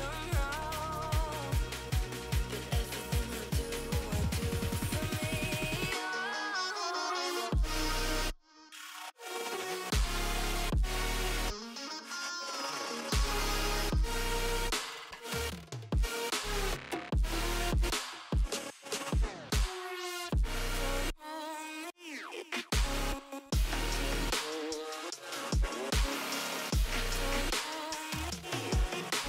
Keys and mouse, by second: 0.9 click, 3.6 space, 5.0 click, 7.9 click, 11.8 click, 12.1 space, 12.1 click, 12.4 click, 13.6 click, 13.8 shift+click, 14.3 click, 16.3 click, 17.1 click, 18.4 click, 18.6 click, 20.2 ctrl+shift+[, 20.8 ctrl+], 21.4 ctrl+[, 23.4 click, 23.7 Down, 23.8 Down, 28.9 Up.